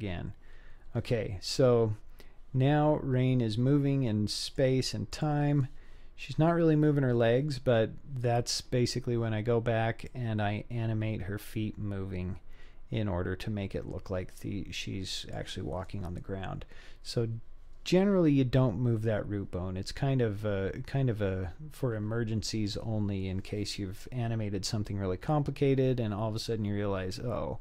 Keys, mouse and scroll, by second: 1.0-1.6 scroll up 2, 1.6 scroll up 4, 1.8-2.8 scroll down 3, 2.8-3.2 scroll up 2, 4.5 click, 5.1 click, 6.0-6.6 scroll down 2, 6.6-7.0 scroll up 3, 7.1-7.7 scroll down 4, 7.7-9.1 scroll up 2, 10.1-15.4 drag, 20.3-21.0 scroll up 2, 21.0 scroll down 1, 21.0-21.5 scroll down 2, 21.5-21.9 scroll up 2.